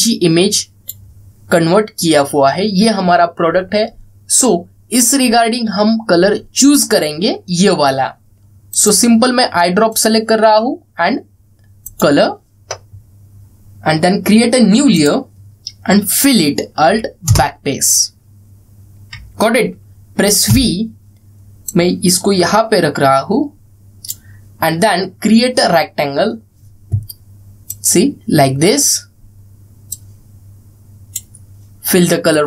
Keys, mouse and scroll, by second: 9.4 click, 15.7 click, 21.2 v, 22.4-24.9 drag, 28.4-29.6 drag.